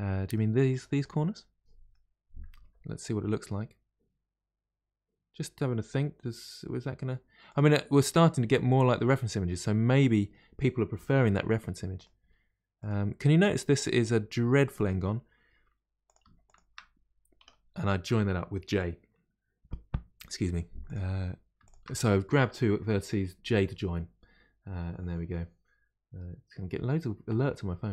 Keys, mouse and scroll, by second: 0.1 middle click, 0.7 click, 1.3-2.6 middle drag, 2.6 g, 8.9-11.2 middle drag, 11.2 1, 11.9 click, 12.1 g, 13.1-16.0 scroll up 4, 16.0 click, 16.4 shift+click, 17.3 j, 20.8 click, 21.6 shift+click.